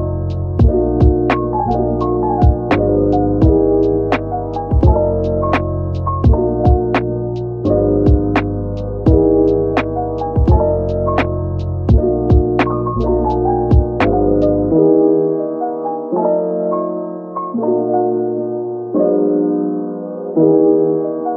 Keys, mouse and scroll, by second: 15.8-18.0 typing.